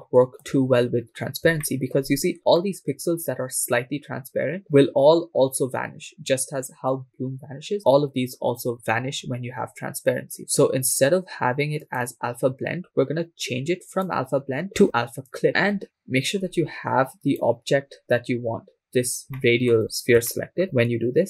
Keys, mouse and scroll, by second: 0.3 shift+middle click, 0.9-1.5 scroll up 4, 1.7 shift+middle click, 2.3-2.6 scroll up 3, 2.7 shift+middle click, 10.4-11.8 scroll down 5, 11.8 scroll down 2, 11.8-12.5 drag, 12.8-13.9 scroll down 2, 14.6 click, 17.4 right click, 18.2-18.7 scroll down 4, 19.2 scroll down 3, 19.8 shift+middle click, 19.8 scroll up 3, 20.4 shift+middle drag, 20.6-20.9 scroll up 3.